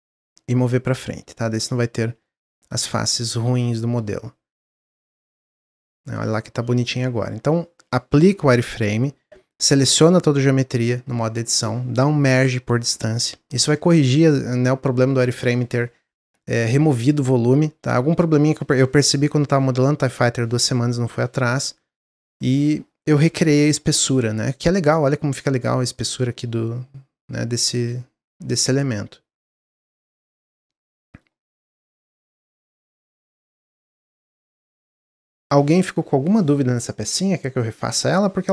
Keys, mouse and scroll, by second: 1.8 Tab, 2.2-2.9 middle drag, 2.9 z, 4.9 click, 5.3-5.9 middle drag, 5.9 scroll down 1, 6.1-7.0 middle drag, 7.0 scroll up 1, 7.3-7.9 scroll down 2, 7.9-10.4 scroll down 1, 22.5-23.8 middle drag, 23.8 scroll up 3, 24.1-27.7 middle drag, 27.7-28.5 scroll down 7, 28.5-29.6 middle drag, 29.6 click, 29.9 middle click, 30.2 scroll up 2, 30.5-34.3 shift+middle drag, 34.3 click.